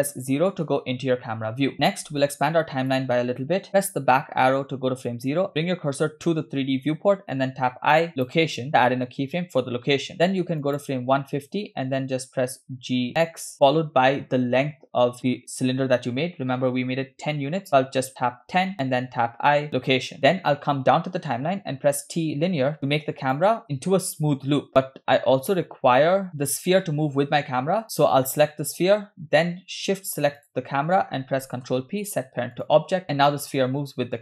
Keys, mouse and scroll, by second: 0.0 KP_0, 1.2-1.5 scroll down 2, 2.2 click, 3.8 Left, 7.7 i, 10.7 click, 12.7 g, 18.9 i, 21.8 t, 23.3 click, 24.2 space, 24.8 space, 24.9-25.5 drag, 26.3 click, 30.4 shift+click, 31.7 ctrl+p, 33.2 space.